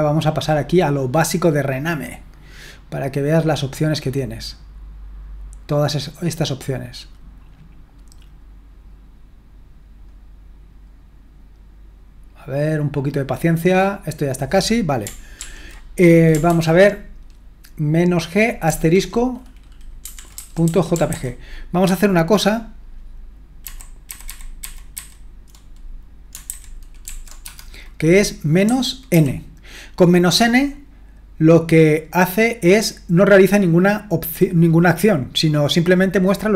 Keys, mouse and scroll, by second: 0.0-0.5 scroll down 1, 0.5-2.3 scroll down 1, 2.3 scroll up 1, 2.5-3.5 scroll down 2, 3.5-8.1 scroll down 1, 15.4 ctrl+p, 16.5 ctrl+p, 19.8-21.6 typing, 23.6 alt+b, 24.1 alt+b, 24.2 alt+b, 24.6 alt+b, 24.9 alt+b, 26.5 alt+b, 27.0 alt+f, 27.4 space, 28.9-29.6 typing.